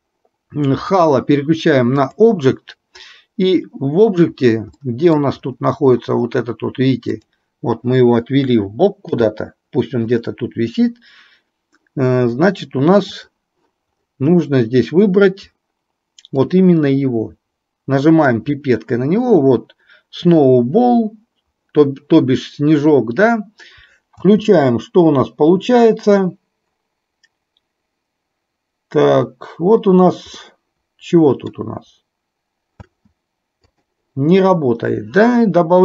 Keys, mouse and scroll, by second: 1.0-2.3 drag, 4.9-5.3 middle drag, 10.3 g, 13.1 click, 16.5 click, 24.3 space, 30.6-31.9 middle drag, 33.0 space, 33.8 click.